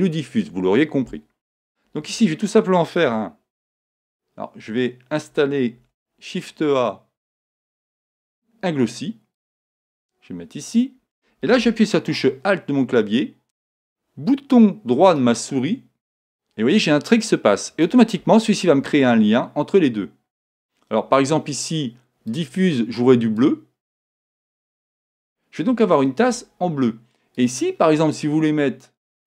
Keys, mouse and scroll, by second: 5.8 shift+a, 10.8-12.5 drag, 15.3-17.2 right drag, 22.3-24.0 drag, 27.4-29.2 drag.